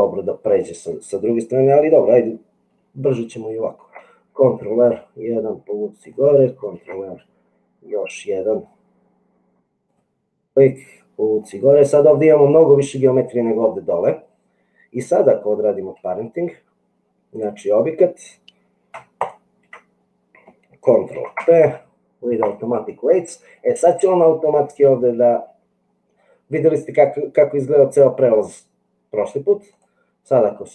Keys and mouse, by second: 3.9 ctrl+r, 6.7 ctrl+r, 16.0 Tab, 21.1 ctrl+p, 29.6 click.